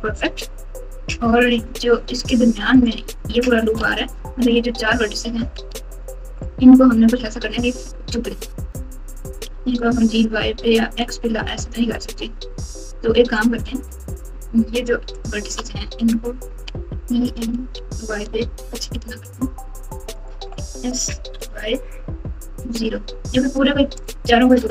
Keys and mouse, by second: 1.5 Tab, 3.8 alt+z, 5.5 alt+z, 9.5 g, 16.7 e, 20.5 s.